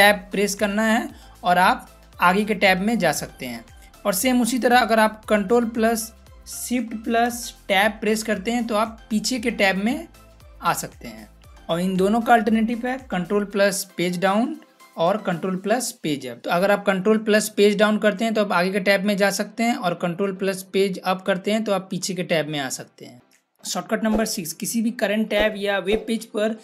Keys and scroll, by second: 0.0 ctrl+Tab, 7.8 ctrl+shift+Tab, 16.4 ctrl+Page_Up, 17.6 ctrl+Page_Down, 21.0 ctrl+Page_Up.